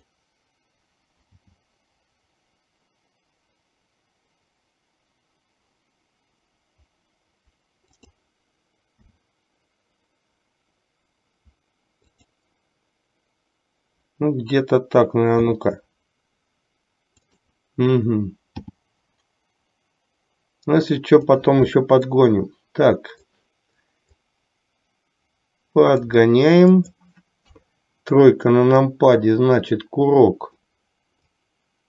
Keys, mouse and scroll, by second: 1.4 g, 9.2 s, 15.7 s, 18.5 g, 22.3-23.4 middle drag, 24.3-26.4 drag, 27.7 KP_3, 29.0-30.8 drag, 31.5-31.8 drag.